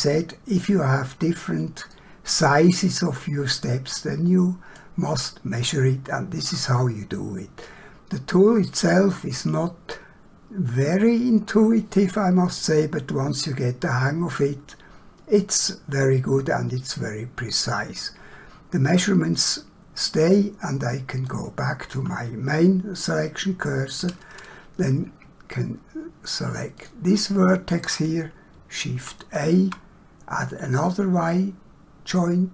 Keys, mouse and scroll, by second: 1.9 middle click, 21.4 click, 26.7 click, 28.9 shift+a, 30.7 click.